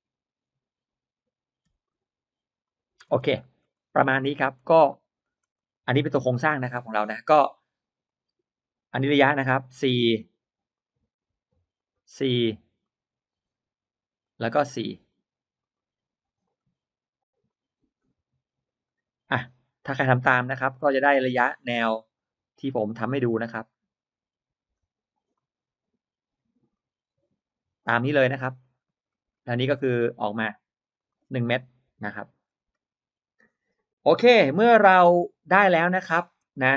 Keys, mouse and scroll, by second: 1.6 e, 1.7 click, 2.9-3.2 scroll down 1, 3.0 space, 3.3 middle click, 3.6-4.0 scroll up 1, 4.0 middle click, 4.0-4.4 scroll down 1, 4.2 middle click, 5.0-5.4 scroll up 1, 5.1 middle click, 5.4 click, 5.9 click, 6.1 scroll up 1, 6.2 middle click, 7.9 click, 9.1 drag, 10.0 click, 10.6-11.0 drag, 11.6 drag, 12.7-13.3 drag, 14.1 click, 15.0 drag, 15.5-16.0 drag, 16.3 click, 17.4 drag, 17.8 click, 18.7 click, 19.7-20.7 drag, 21.0 click, 22.0 drag, 22.8 drag, 23.6 click, 24.6 drag, 25.1-25.6 drag, 26.6-27.6 drag, 27.7 click, 28.4-28.7 scroll down 1, 28.7 middle click, 29.4-30.0 scroll up 1, 30.3 click, 30.8 click, 31.0-31.7 scroll down 1, 34.7-35.0 scroll up 1, 35.4-36.2 scroll down 2, 35.8 middle click, 36.2 middle drag, 36.3 space, 36.4 scroll up 1.